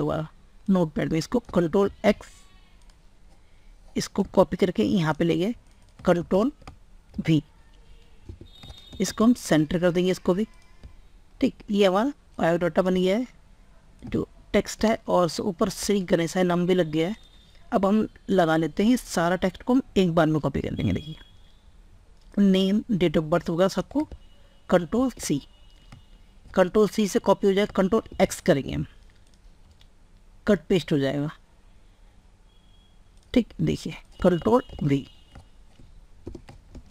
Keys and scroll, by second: 0.0 alt+Tab, 1.8 ctrl+x, 6.1 ctrl+a, 7.2 ctrl+v, 8.6 ctrl+space, 24.4 ctrl+c, 27.8 ctrl+x, 34.4 ctrl+v, 36.4 ctrl+space.